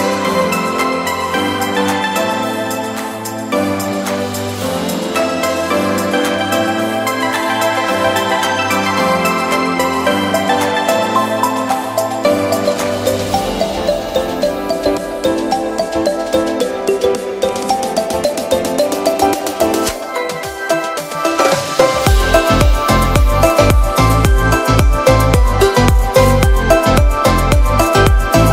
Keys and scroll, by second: 9.2 Return, 15.3 b, 16.7 ], 20.3 [, 22.6 ], 23.6 ], 26.1 [, 28.4 [.